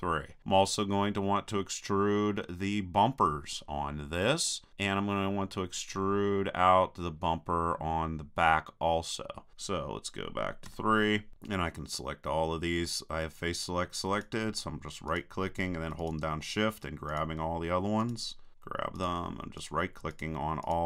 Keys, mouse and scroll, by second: 4.5 click, 4.8-6.0 middle drag, 6.8 middle click, 9.5-10.7 middle drag, 10.7 KP_3, 14.1 right click, 15.0-20.8 drag.